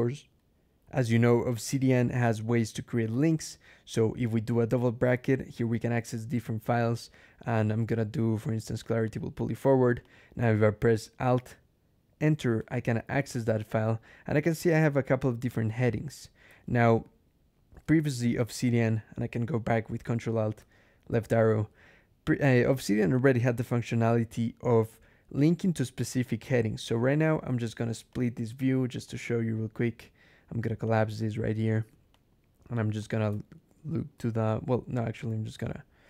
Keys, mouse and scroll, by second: 0.2 alt+\, 2.9 [, 8.7 click, 9.2 click, 9.9 click, 12.4 alt+Return, 16.3 alt+h, 20.5 ctrl+alt+Left, 22.1 click, 22.6 Return, 28.0 click, 28.9 click, 30.8 click, 32.0 click, 32.9 click, 35.5 ctrl+alt+click.